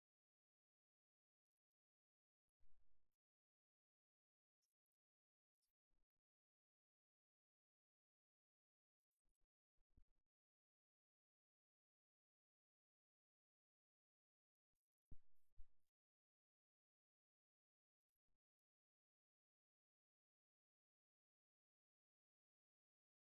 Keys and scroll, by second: 2.0 super+t, 9.1 alt+super+s, 9.7 super+s, 10.0 super+Home.